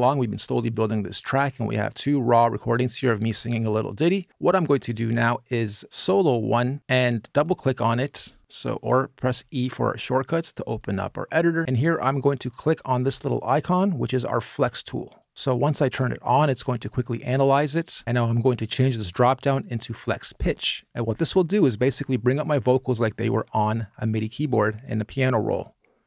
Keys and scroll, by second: 9.2 e, 9.5 e.